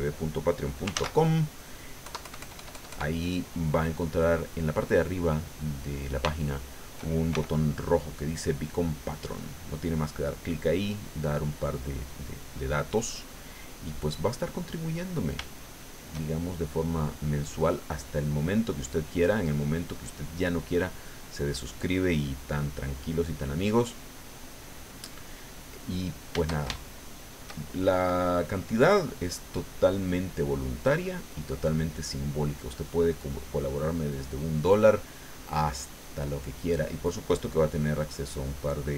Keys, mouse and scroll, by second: 0.9 ctrl+z, 2.0 KP_Add, 3.9-6.1 drag, 6.3 shift+middle click, 7.3 shift+f, 7.8 shift+click, 8.4-14.0 drag, 14.1 middle click, 14.9 middle click, 15.6-16.8 shift+middle drag, 17.1-18.6 drag, 18.8 middle click, 19.5-20.7 drag, 20.8 middle click, 22.5 click, 23.7 click, 24.7 middle click, 26.3 shift+middle click, 26.8 shift+middle click, 28.5-29.7 drag, 29.9 middle click, 30.8 middle click, 31.8 click, 32.7-34.1 drag, 35.4 middle click, 36.2 click, 37.3 click, 38.1 click, 38.7 click.